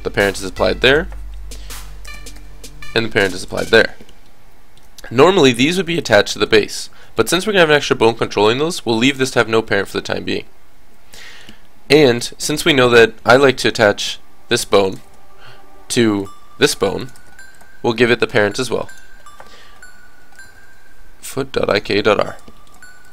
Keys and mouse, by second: 0.2-2.8 drag, 0.9-2.0 right drag, 2.2 o, 6.2-8.1 middle drag, 12.1-13.9 drag, 13.9-16.2 middle drag, 14.0 r, 15.1 ctrl+z, 16.2-18.2 drag, 16.5 r, 17.2 ctrl+z, 18.9-20.7 drag, 18.9 right click, 20.6 o, 20.8-22.6 middle drag, 23.0 click.